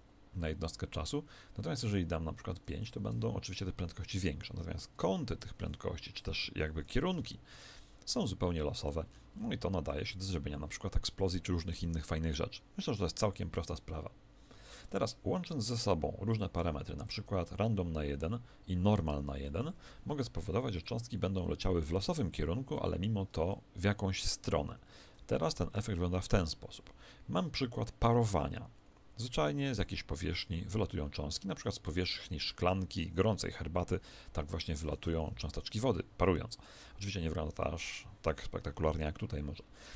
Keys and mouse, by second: 1.8 click, 4.4 alt+a, 5.4 Escape, 6.7 shift+Left, 7.2 alt+a, 8.2-11.7 middle drag, 13.4 Escape, 16.3 click, 20.7 KP_1, 24.9 alt+a, 28.7-31.0 middle drag, 34.6 Escape, 35.2 alt+a.